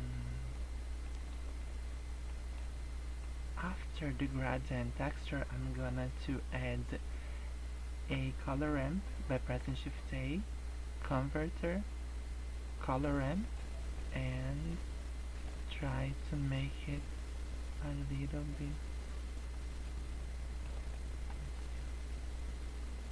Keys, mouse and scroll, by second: 0.0 click, 0.5 click, 1.0 shift+middle click, 2.3 shift+middle click, 2.8-3.5 scroll up 4, 3.6 click, 9.7 shift+a, 14.2 shift+middle click, 15.0-15.4 scroll up 4, 15.5 shift+middle click, 17.7 click, 19.2 click, 19.9 middle click, 20.9 shift+middle click, 21.3 scroll up 6.